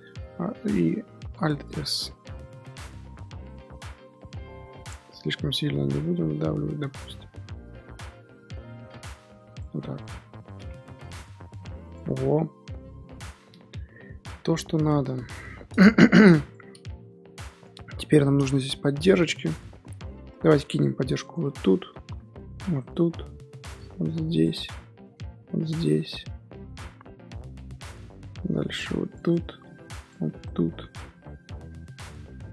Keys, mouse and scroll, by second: 0.0 alt+e, 1.3 alt+s, 9.7 Tab, 10.0 scroll down 1, 10.0-10.7 middle drag, 10.7 ctrl+2, 11.3 scroll down 1, 11.5-11.8 middle drag, 11.8 click, 12.1 scroll down 3, 12.2-15.5 middle drag, 15.5 scroll up 2, 15.9 KP_7, 16.4 click, 16.8 scroll up 3, 17.0 Tab, 17.6 Tab, 17.8-18.2 scroll up 1, 18.2 shift+middle click, 18.4 scroll up 1, 18.9 Tab, 19.5-19.9 scroll up 4, 20.5 ctrl+r, 21.4 scroll down 3, 22.0 ctrl+r, 23.3 ctrl+r, 25.0 ctrl+r, 26.6 ctrl+r, 28.6 ctrl+r, 29.6 ctrl+r, 30.6 scroll down 1, 30.7 middle click, 31.1 scroll up 2, 31.2 scroll down 3, 31.6 z, 32.0 middle click, 32.3 z.